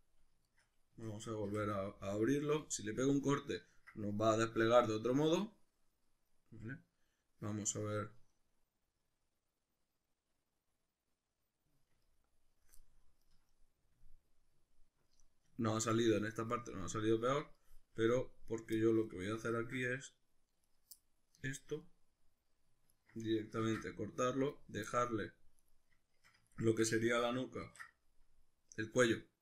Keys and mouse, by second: 0.9 a, 1.4 u, 4.4 ctrl+middle click, 11.6 middle click, 12.8-18.5 ctrl+middle drag, 18.5 right click, 18.8-20.7 middle drag, 20.7 right click, 21.0-22.9 middle drag, 22.9 ctrl+right click, 23.7 ctrl+e, 24.9 middle click, 25.7 right click, 26.5 ctrl+right click, 27.7 ctrl+e.